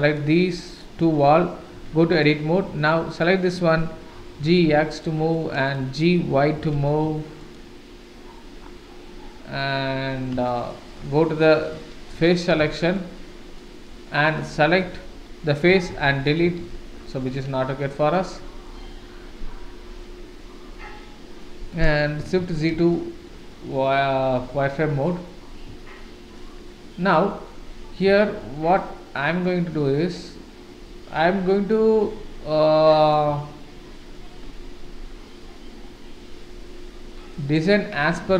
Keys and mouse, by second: 0.1 shift+click, 0.6 shift+click, 1.7 Tab, 3.0 click, 4.1 g, 5.3 click, 6.5 g, 9.6 middle click, 10.5 shift+middle click, 12.1 3, 12.7 shift+middle click, 13.5 middle click, 14.2 click, 15.7 x, 16.3 click, 16.4 x, 17.3 Tab, 18.2-18.6 middle drag, 22.4 shift+z, 22.9-23.2 shift+middle drag, 23.5-23.8 middle drag, 25.9-26.4 shift+middle drag, 26.8-27.2 middle drag, 28.4-29.4 shift+middle drag, 30.2-31.7 middle drag, 32.5-33.1 middle drag, 33.6-34.1 shift+middle drag, 37.0-37.5 middle drag.